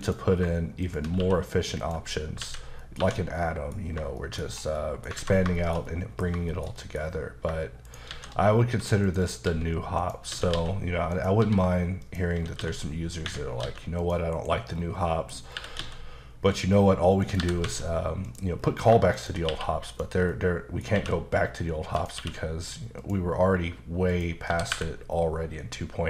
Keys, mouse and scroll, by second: 0.1 click, 0.9 shift+click, 1.2 q, 1.8 click, 2.4 alt+a, 2.8 middle click, 3.0 1, 3.4 middle click, 3.9-4.8 scroll down 4, 4.2 shift+middle click, 4.8 middle click, 5.2 alt+a, 5.6 shift+middle click, 6.5 shift+middle click, 7.2 scroll up 1, 7.9 shift+right click, 8.1 shift+a, 9.1 click, 9.5-12.6 typing, 10.0 click, 11.1 click, 12.0 click, 13.3 Escape, 13.6 s, 14.0 click, 14.3 KP_Decimal, 14.6 scroll up 1, 14.7 scroll down 2, 15.0 middle click, 15.4 scroll down 2, 15.6 typing, 17.2 click, 17.4 typing, 18.3 click, 18.6-18.9 scroll down 2, 19.2 shift+click, 19.5 q, 19.9 click, 20.3 middle click, 21.0 q, 22.0 click, 22.2 q, 23.0 click, 23.6-23.9 scroll down 1, 24.1 click, 24.5 typing.